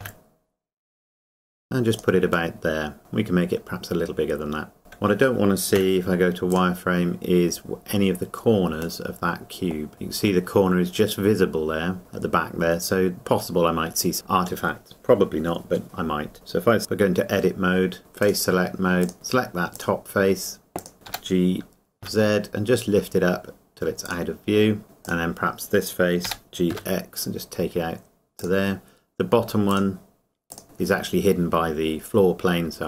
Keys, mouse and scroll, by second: 1.9 click, 2.5 middle click, 3.0 s, 4.8 KP_0, 7.2-7.8 scroll down 1, 9.3 middle click, 9.9 KP_0, 12.0-12.3 scroll up 1, 16.8 Tab, 21.1 g, 24.0 z, 24.1 click, 25.0 click, 26.3 g, 28.4 click.